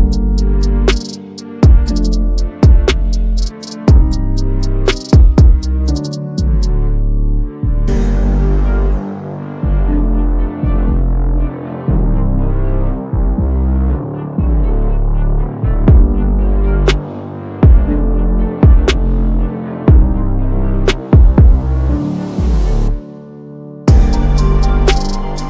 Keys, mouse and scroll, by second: 0.9 right click, 1.6 click, 3.3 click, 3.9 right click, 4.1 click, 4.7-6.5 typing, 7.5-7.9 drag, 11.5 click, 12.4 click, 13.2 click, 14.8 click, 15.7 click, 16.7 click, 17.5 click, 18.6 click, 21.0 click, 21.8 click, 22.6 click, 24.0 7, 24.3 click.